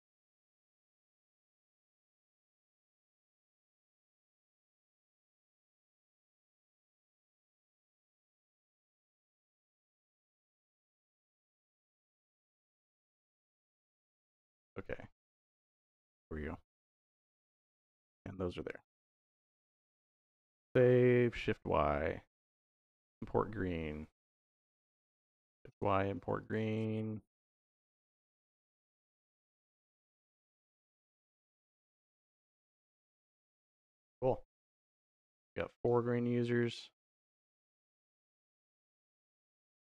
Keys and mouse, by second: 0.0 middle click, 0.3 click, 1.3 shift+d, 1.5 y, 2.2 click, 2.7 middle click, 3.3 click, 5.2-6.1 drag, 6.7-7.5 drag, 8.2-9.1 drag, 9.7-11.3 drag, 12.4-13.4 drag, 13.4 click, 14.6 click, 15.3-16.7 drag, 17.6-18.6 drag, 20.3 ctrl+s, 21.1 shift+y, 24.1 click, 25.1 shift+y, 26.2 click, 26.6 shift+y, 28.3 shift+y, 29.7 shift+y, 31.9 click, 35.4 click, 37.9 middle click, 38.7 middle click, 39.1 click, 39.5 click.